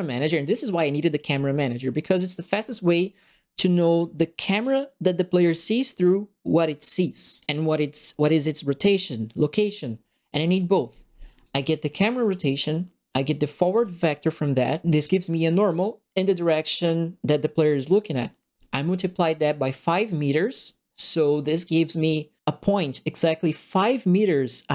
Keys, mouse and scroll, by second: 0.0 click, 11.2 right click, 12.0 click, 13.7 click.